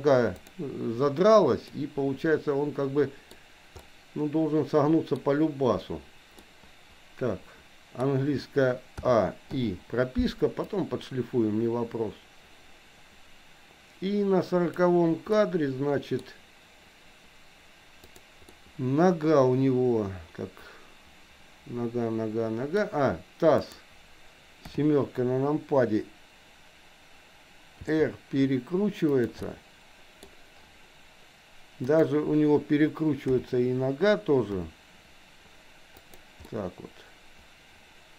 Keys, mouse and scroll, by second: 0.5 r, 1.7-3.4 middle drag, 3.9-5.1 middle drag, 5.1-6.5 scroll down 1, 6.5-8.0 middle drag, 9.0 a, 9.6 i, 10.7-15.0 drag, 15.4 middle click, 18.1 click, 18.5-22.7 middle drag, 23.6 click, 24.7 KP_7, 27.7 r, 29.5 middle click, 32.0 click, 33.2 KP_7, 34.6 r, 36.5-38.1 middle drag.